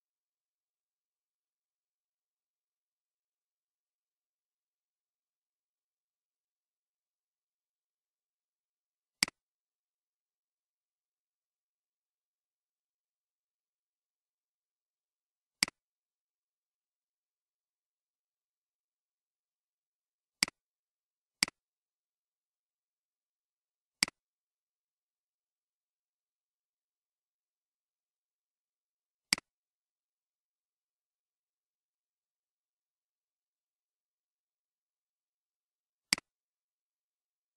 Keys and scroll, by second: 12.6 ctrl+c, 18.1 ctrl+v.